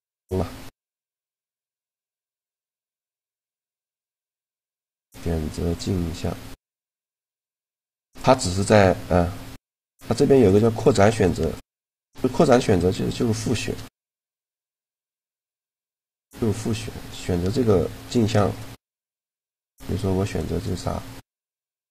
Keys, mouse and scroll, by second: 0.7-3.3 middle drag, 3.3 right click, 4.1 middle click, 6.4 click, 9.4-13.8 drag, 13.1-17.3 middle drag, 18.2-21.9 right drag.